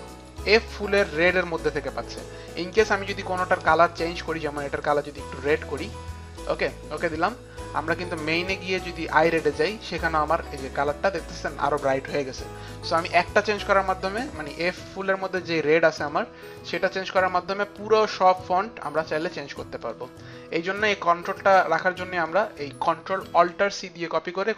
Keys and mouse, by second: 0.2 click, 4.4 click, 5.4 click, 6.6 click, 8.0 click, 9.1 click, 10.7 click, 12.2 click, 12.7 click, 14.9 click, 15.0 click, 16.1 click, 19.9 click, 22.3 click, 23.4 click.